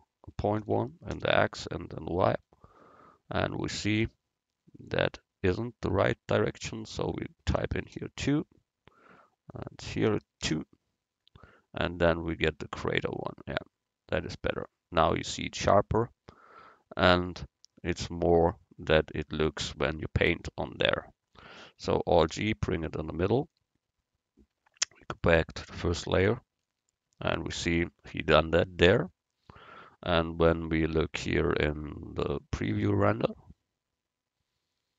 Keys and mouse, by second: 2.4 middle click, 6.8-11.4 drag, 11.8 middle click, 22.2 alt+g, 25.1-26.9 drag, 30.4 click, 31.5-33.4 drag.